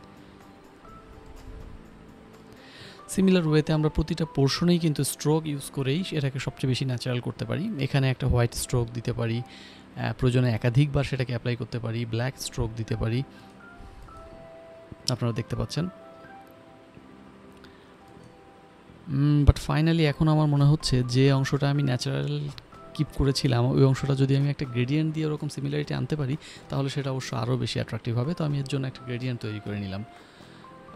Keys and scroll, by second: 5.2 shift+n, 6.1 d, 6.4 b, 6.9 x, 11.9-15.8 typing, 13.3 Return, 21.3 Return, 21.5 ctrl+alt+d, 21.6 4, 21.6 Return, 21.8 ctrl+alt+d, 22.5 Return, 23.0 ctrl+j, 23.5 g.